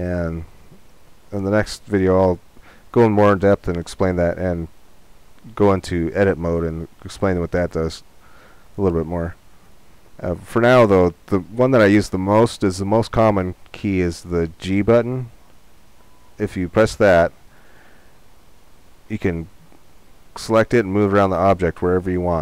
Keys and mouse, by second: 7.1-9.1 drag, 9.1-13.7 middle drag, 15.4-17.4 drag, 16.7 g.